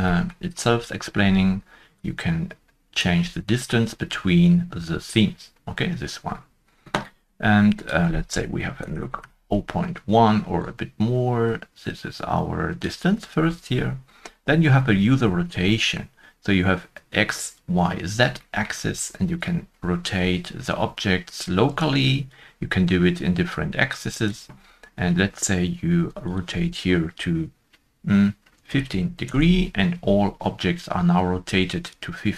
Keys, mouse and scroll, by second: 0.1 shift+middle click, 0.4-0.9 scroll up 1, 1.9 scroll up 1, 1.9 shift+click, 8.6 shift+middle click, 8.6 shift+click, 8.6 scroll up 1, 8.8 ., 8.8 0, 8.9 0, 9.1 Return, 9.1 1, 10.6 Return, 10.6 shift+click, 15.3-15.6 scroll down 1, 18.3 scroll down 1, 18.4 shift+middle click, 21.6 shift+click, 21.6-22.2 scroll down 1, 28.6 shift+click, 28.6 shift+middle click, 28.6 scroll down 1, 28.6 1, 28.7 1, 29.2 5, 29.2 Return.